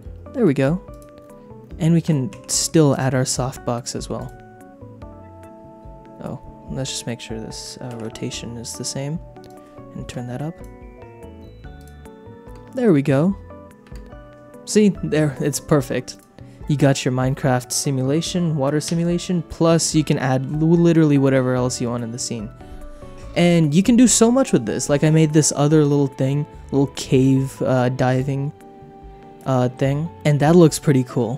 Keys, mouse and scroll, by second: 0.9 click, 2.3 shift+d, 2.9 click, 4.2 click, 7.9 alt+r, 9.5-10.7 drag, 11.8 click, 12.5 space, 13.9 space, 16.1 click, 16.6 middle click, 18.8 KP_0, 28.1 click, 30.1 shift+click, 30.2 s.